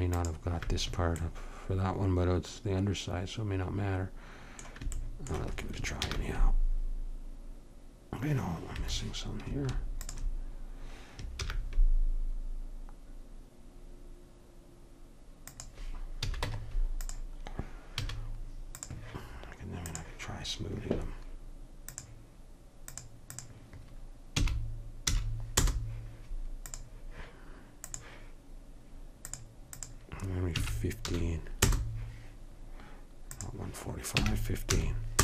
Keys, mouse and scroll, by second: 1.3-3.0 middle drag, 6.1 ctrl+b, 10.0-12.0 drag, 11.4 ctrl+b, 16.2 a, 16.5 Tab, 18.0 a, 18.8-21.0 drag, 21.2-25.3 drag, 26.7-31.7 drag, 33.4-35.2 drag.